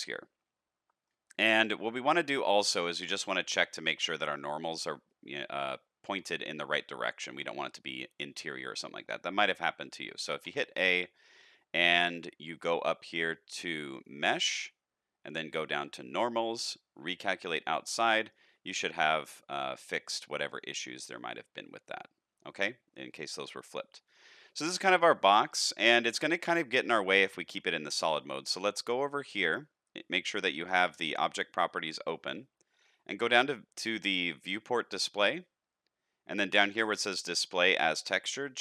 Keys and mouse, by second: 4.3 shift+middle click, 5.1 middle click, 6.4 middle click, 7.0 shift+middle click, 10.4 a, 14.1-17.3 drag, 17.8 middle click, 18.6 alt+a, 18.9 middle click, 19.7 shift+middle click, 20.1 middle click, 20.8 shift+middle click, 21.3-23.7 middle drag, 23.9 shift+middle click, 24.4-25.4 middle drag, 26.1 middle click, 26.6 shift+middle click, 27.4 middle click, 32.2 click, 34.6 click, 37.9-38.6 drag.